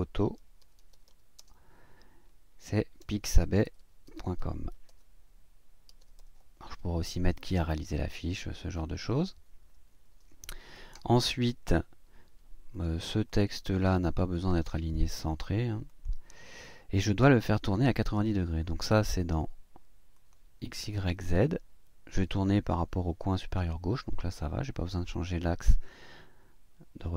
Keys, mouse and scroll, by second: 0.1-1.5 typing, 2.7-6.6 typing, 8.0 click, 8.7 click, 9.9 BackSpace, 12.7 click, 13.3 click, 14.6 click, 15.9 click, 19.2 click, 20.1 click.